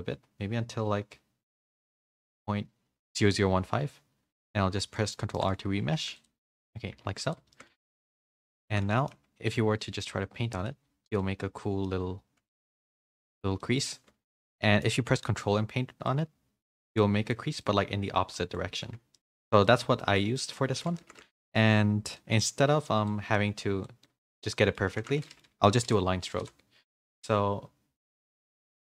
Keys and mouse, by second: 4.3 ctrl+r, 4.9 middle click, 5.3 shift+click, 5.9 f, 6.4 z, 6.5 click, 6.9 f, 7.5 shift+click, 7.9 f, 8.7 shift+click, 8.9 middle click, 10.0 click, 10.0 f, 11.2 middle click, 12.5 middle click, 13.6 middle click, 14.4 shift+middle click, 14.6 middle click, 16.0-17.3 ctrl+drag, 17.6 middle click, 19.1 shift+middle click, 19.6 middle click, 20.3 middle click, 20.9 ctrl+z, 21.1 ctrl+z, 22.2 shift+middle click, 23.0 click, 24.0 middle click, 25.0 ctrl+z, 25.2 middle click, 25.9 n, 26.4 n.